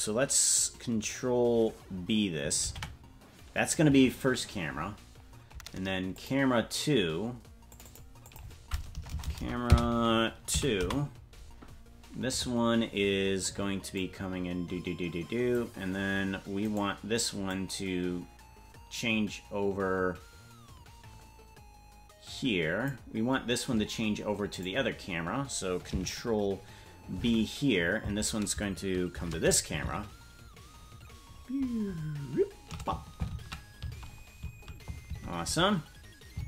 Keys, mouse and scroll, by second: 2.7 ctrl+b, 6.1 click, 7.7 click, 7.9-11.4 drag, 9.0 BackSpace, 9.7 BackSpace, 13.9-15.6 drag, 16.7 right click, 17.5-22.9 drag, 24.5 click, 27.2 ctrl+b, 29.1 shift+`.